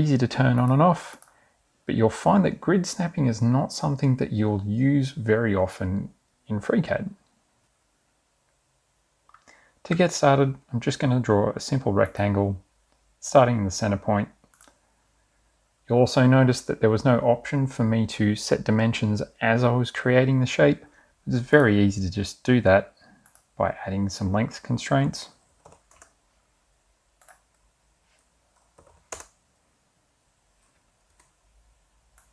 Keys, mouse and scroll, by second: 0.6 click, 1.2 click, 9.6 click, 21.7 click, 23.6 click, 25.6 2, 26.0 0, 26.3 Return, 27.3 click, 28.8 3, 29.1 0, 29.3 Return, 31.2 Escape.